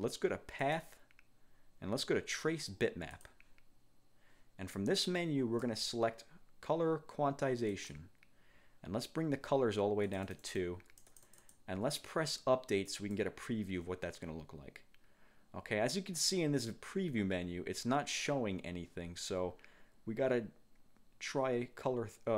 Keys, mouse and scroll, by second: 0.8 click, 3.2 click, 5.1 click, 7.8 click, 10.2-11.8 drag, 13.0 click.